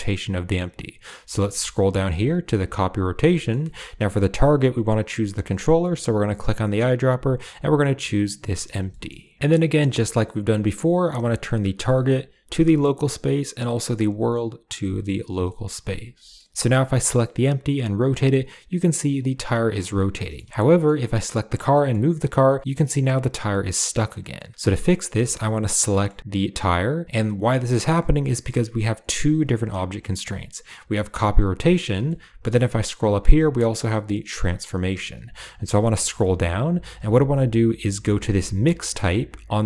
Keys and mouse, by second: 3.2 shift+click, 3.5 click, 8.1 typing, 8.8 shift+click, 11.4-12.5 drag, 13.6-14.8 drag, 15.3 shift+middle click, 16.1 shift+middle click, 20.1 middle click, 20.4 shift+middle click, 20.6 middle click, 21.1 click, 21.6 g, 24.2 middle drag, 24.8 click, 25.0 shift+drag, 25.8 shift+click, 32.0 ctrl+middle click, 38.6 click.